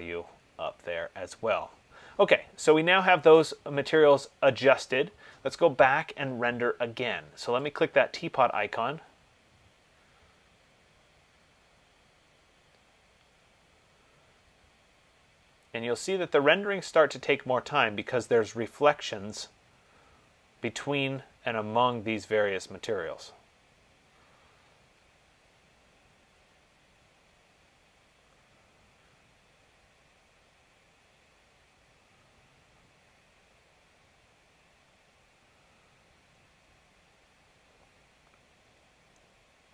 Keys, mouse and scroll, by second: 0.0 3, 0.0 click, 8.1 click.